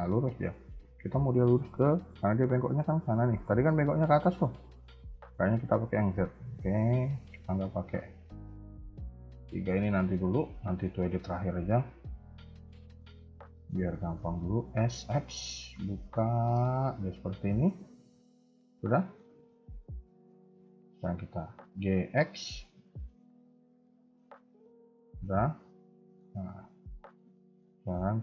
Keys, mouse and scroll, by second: 6.5 ctrl+z, 6.8 ctrl+z, 8.7 ctrl+z, 9.2 ctrl+z, 9.8 shift+middle click, 10.3 KP_1, 10.5 KP_3, 11.4 scroll up 1, 11.9 alt+click, 12.4 middle click, 14.6 s, 18.5 middle click, 19.2 KP_1, 19.4 KP_3, 19.6 KP_1, 21.7 g, 25.3 scroll down 2, 25.5 middle click, 26.6 KP_3, 26.9 KP_1, 27.7 shift+middle click, 28.0 middle click.